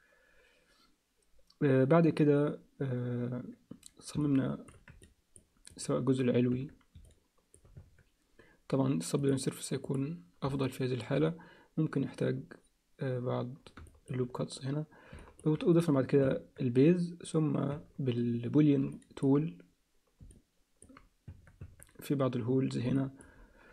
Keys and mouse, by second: 4.2 alt+middle click, 5.0 ctrl+alt+middle click, 5.7 click, 6.6 Tab, 7.1 alt+middle click, 7.9 Tab, 9.2 click, 10.6 alt+middle click, 13.9 alt+shift+middle click, 15.2 alt+shift+middle click, 15.7 click, 16.2 Tab, 17.9 Tab, 18.9 alt+middle click, 20.3 alt+middle click, 21.3 Tab, 21.8 Tab, 22.9 alt+middle click.